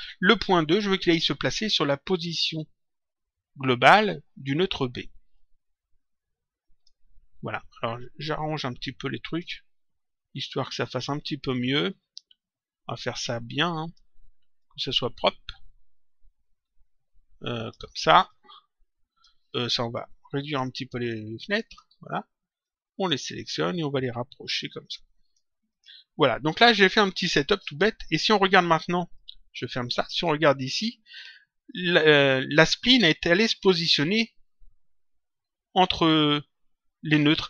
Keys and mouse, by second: 5.3 click, 8.3 click, 11.8 click, 14.5 click, 18.2 click, 20.4 ctrl+click, 23.9 click, 25.6 click, 28.5 click, 30.0 click.